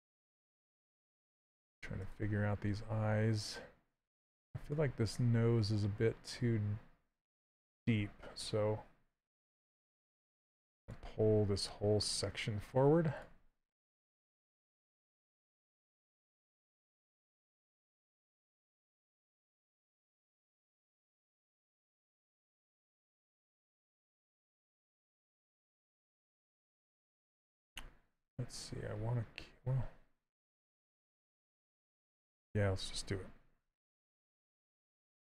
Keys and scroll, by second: 12.3 s, 33.7 s.